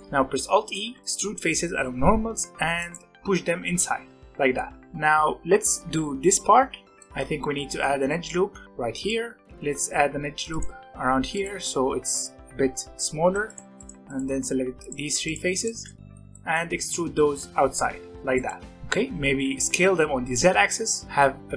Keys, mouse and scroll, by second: 0.8 alt+e, 2.8-6.9 middle drag, 6.9 Tab, 7.0 middle click, 7.4 alt+a, 7.7 middle click, 8.4 ctrl+r, 9.4 3, 9.8 ctrl+r, 13.2 3, 13.8 shift+click, 14.0 shift+click, 14.8 shift+click, 15.2 shift+click, 15.5 shift+click, 15.8 middle click, 16.7 e, 18.7 middle click, 19.3 s.